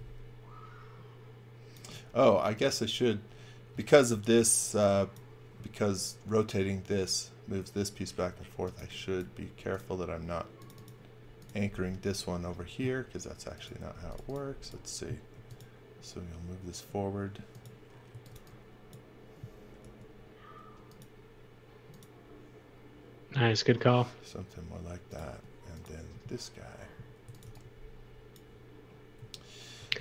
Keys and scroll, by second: 0.0-0.2 typing, 1.9 space, 3.8 x, 4.1 v, 4.7 x, 8.2-9.4 typing, 15.3 m, 17.8-18.8 typing, 19.8 r, 25.2 space, 26.9-27.9 typing, 29.5-30.0 typing.